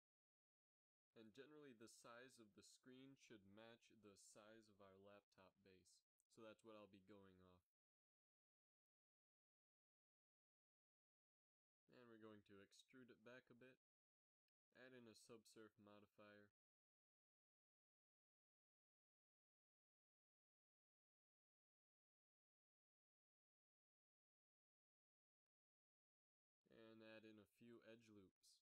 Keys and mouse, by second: 0.4 a, 0.6 b, 1.4 g, 3.0 z, 3.7 z, 5.0 KP_1, 6.1 a, 6.4 a, 7.1 r, 9.4 ctrl+n, 10.9 a, 12.5 a, 12.8 e, 15.4 ctrl+2, 18.9 a, 19.1 a, 19.9 ctrl+n, 21.0 KP_1, 21.4 z, 23.4 g, 25.9 z, 28.1 ctrl+r.